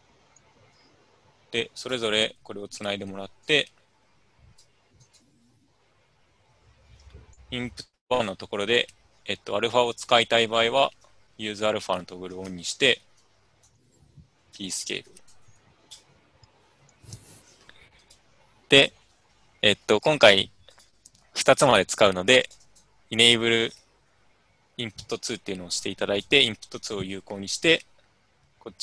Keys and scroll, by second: 18.9-20.8 typing.